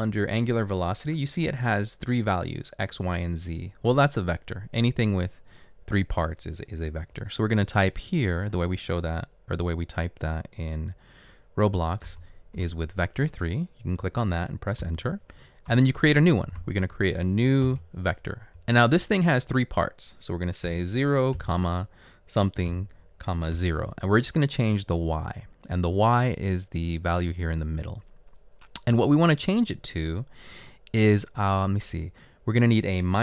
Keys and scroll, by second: 12.2-12.6 typing, 14.8 Return, 16.2-17.7 typing, 18.6 Left, 24.7 Left.